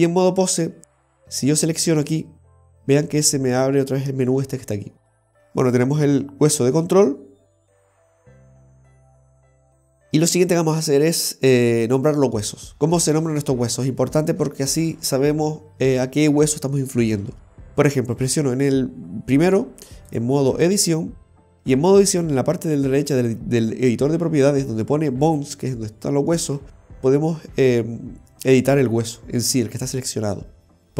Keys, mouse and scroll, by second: 2.1 right click, 5.3 click, 5.8 right click, 18.2 right click, 20.2 click, 22.2 l, 25.4 click.